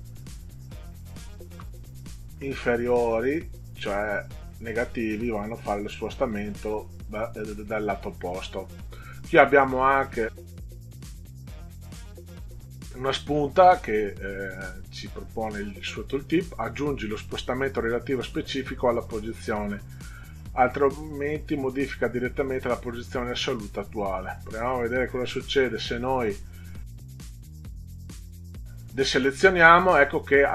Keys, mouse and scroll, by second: 1.6 -, 4.9 click, 5.3 click, 5.6 click, 6.0 click, 6.3 click, 6.6 click, 24.6 click.